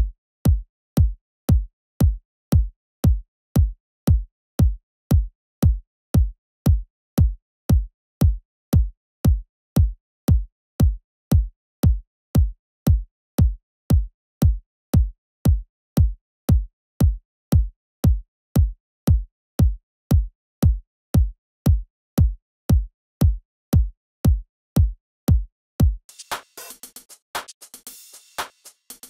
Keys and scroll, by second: 26.0 typing.